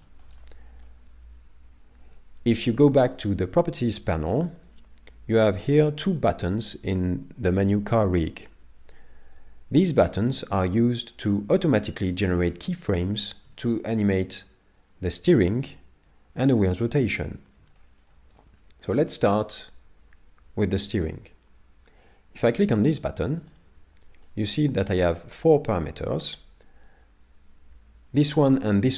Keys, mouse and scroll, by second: 0.0 shift+middle click, 0.4 middle click, 10.7 middle click, 13.7 shift+middle click, 17.8 shift+middle click, 18.4 middle click, 23.4 click.